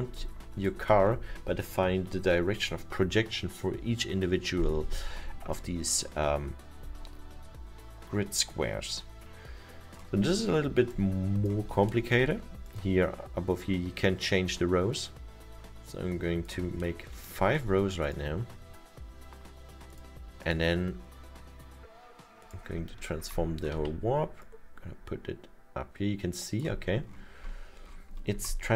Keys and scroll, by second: 25.8 w.